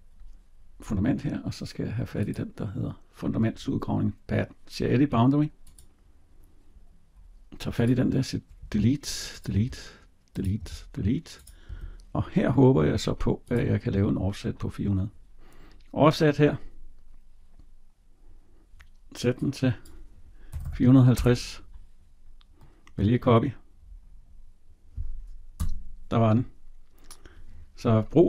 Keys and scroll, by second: 8.4 Delete, 25.4 Tab.